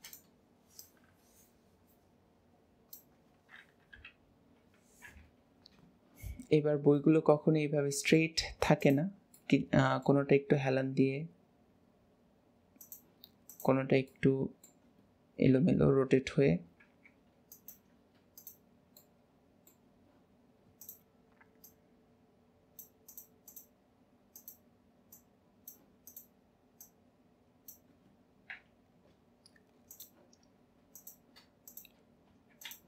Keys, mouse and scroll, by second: 0.7 click, 3.8 KP_7, 5.0 KP_1, 6.2-6.8 scroll down 2, 6.9 middle drag, 7.3-8.8 middle drag, 8.8 click, 9.3 middle drag, 9.7-10.7 middle drag, 13.4 click, 14.1-15.5 middle drag, 15.5 KP_7, 16.3-16.9 scroll up 1, 16.9 r, 18.9 scroll up 1, 19.0 middle drag, 19.3-20.8 middle drag, 20.8 click, 21.6 click, 23.1 click, 23.5 click, 24.3 click, 25.1 click, 26.0 click, 26.8 click, 28.5 KP_7, 29.9 click, 31.6 click.